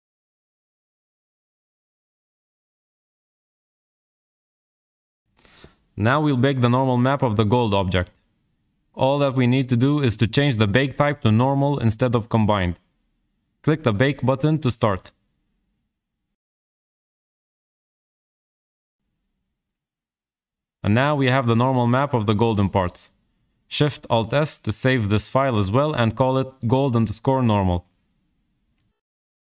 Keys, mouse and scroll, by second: 9.5-12.5 drag, 14.3-16.6 drag, 22.0 alt+shift+s.